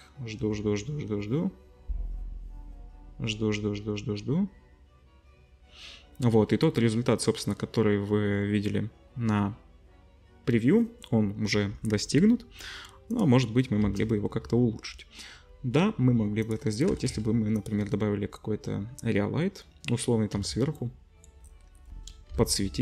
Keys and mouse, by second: 13.1 click, 13.8 shift+a, 16.9 g, 18.2-20.3 drag, 20.3 middle click, 20.3 z, 22.3 KP_7.